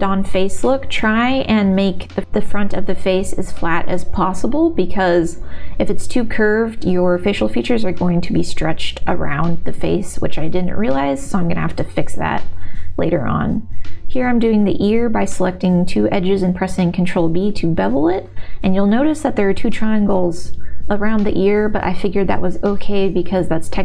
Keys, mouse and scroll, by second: 0.4 middle click, 0.9 middle click, 1.4 g, 2.2-3.5 middle drag, 4.4 g, 4.6 middle click, 5.2 g, 6.0 middle click, 6.9 g, 7.1 middle click, 7.8 g, 8.3-9.4 middle drag, 9.9 g, 10.4 middle click, 11.1 1, 11.7 2, 13.3 ctrl+b, 15.2 click, 15.5 middle click, 16.7 3, 16.8 click, 17.2 middle click, 18.0 e, 18.7-19.9 middle drag, 20.3 s, 21.7 middle click, 22.1 e, 23.6 s.